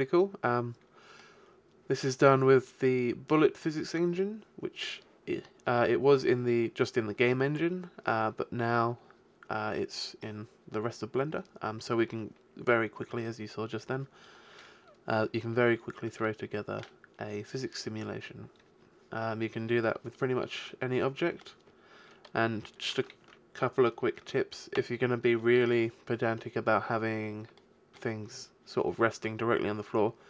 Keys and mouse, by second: 9.9-11.7 middle drag, 16.3-17.5 middle drag, 20.9-22.9 middle drag, 23.2 alt+a, 24.1 KP_1, 24.7 KP_5, 25.6 KP_5, 26.9 middle click, 29.2-30.2 middle drag.